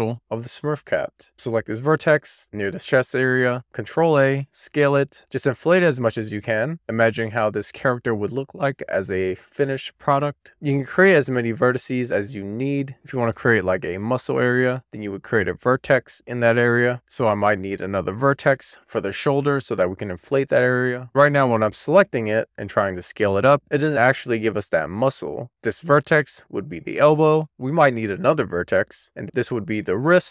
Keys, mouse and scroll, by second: 1.2 click, 1.6 alt+z, 1.9 alt+z, 2.2 ctrl+a, 5.3 click, 5.6 alt+z, 5.7 middle click, 6.4 click, 6.5 middle click, 7.0-7.4 scroll up 1, 7.4 d, 7.7 z, 8.5 click, 8.6 scroll up 2, 8.7 middle click, 9.0 shift+middle click, 9.3-10.3 scroll down 3, 9.5 shift+middle click, 9.8 alt+z, 10.3 click, 11.3 shift+click, 14.6-15.8 right drag, 15.8 click, 16.0 middle click, 16.8 alt+z, 17.4 middle click, 18.8 alt+z, 20.3 alt+z, 20.9 click, 21.2 ctrl+a, 21.9-22.8 scroll up 5, 23.1 scroll down 2, 23.3-24.3 scroll up 3, 24.8 scroll down 3, 25.0 right click, 25.1 middle click, 25.5 click, 25.8 ctrl+a, 28.2 click, 28.8 alt+z, 28.9 alt+z, 29.1 ctrl+a.